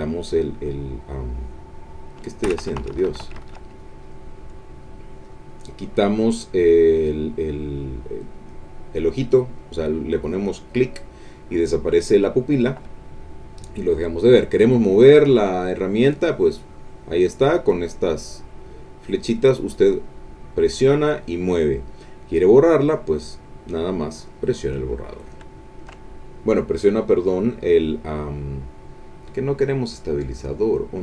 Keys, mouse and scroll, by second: 1.2 click, 2.6 Escape, 3.7 click, 4.0 click, 5.2 click, 6.2-7.6 drag, 7.6 middle click, 8.4 click, 9.6 click, 10.2 click, 10.7 click, 11.6 click, 12.5 click, 14.3-17.5 drag, 20.0-21.7 drag, 22.8 click, 24.6 click, 25.6 shift+click, 27.1 click, 29.6 click, 30.6 click.